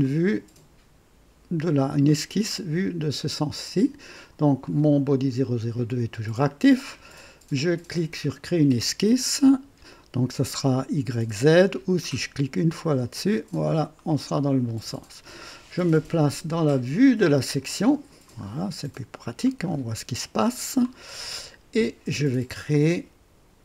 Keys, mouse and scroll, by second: 0.0 right click, 8.2 click, 12.9 click, 14.2 scroll up 2, 14.8 right click, 17.6 click, 18.3 scroll up 2, 18.9 right click, 19.6 scroll up 2, 20.1-20.9 right drag.